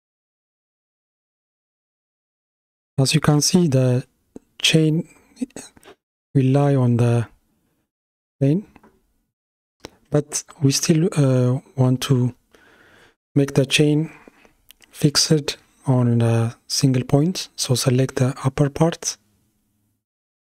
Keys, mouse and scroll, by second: 6.5 space, 8.2 shift+Left, 10.5-14.6 middle drag, 14.6 click.